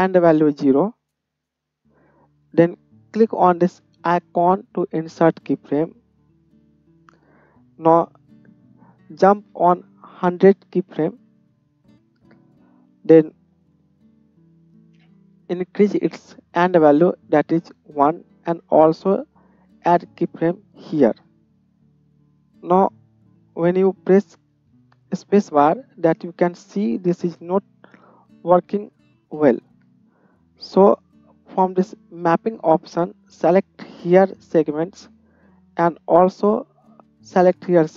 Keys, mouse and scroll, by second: 4.5-7.7 middle drag, 7.7-18.5 drag, 9.7 KP_0, 18.5-23.1 middle drag, 23.1-37.9 drag, 23.7 space, 24.6 space, 26.6 space, 29.4 space.